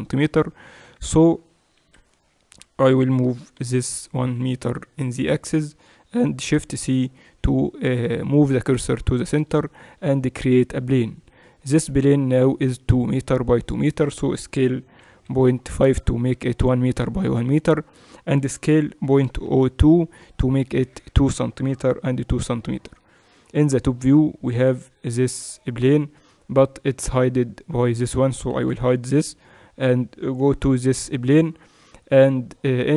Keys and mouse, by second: 1.8 KP_1, 3.3 g, 6.2 shift+c, 9.7 shift+a, 14.9 s, 18.4 s, 21.8 KP_Decimal, 23.3 KP_7, 26.1-27.9 middle drag, 27.9-31.9 right drag, 28.7 h, 30.4 KP_Decimal.